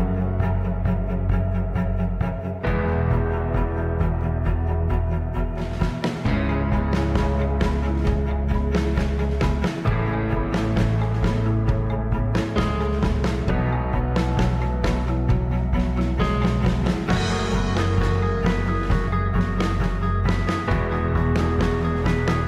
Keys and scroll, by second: 3.0 g, 4.5 ctrl+a, 4.7 Escape, 4.8 ctrl+a, 5.4 ctrl+a, 5.8 Tab, 6.5 z, 9.2 Tab, 10.7 alt+z, 11.9 e, 12.7 e, 16.5 e, 19.4 Escape, 19.8 ctrl+z.